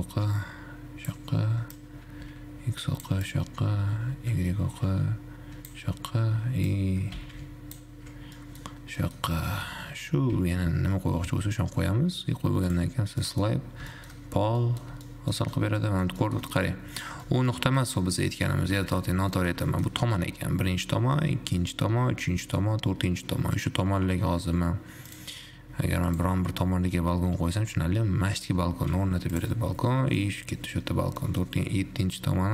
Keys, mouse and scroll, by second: 8.6 middle click, 9.1 scroll up 1, 9.2-12.7 middle drag, 13.1-13.6 drag, 13.6 middle click, 13.7-14.1 scroll up 1, 14.1-16.7 shift+middle drag, 16.7 scroll down 1, 16.8-20.1 middle drag, 20.1-21.1 scroll up 2, 25.3 click, 26.3 click.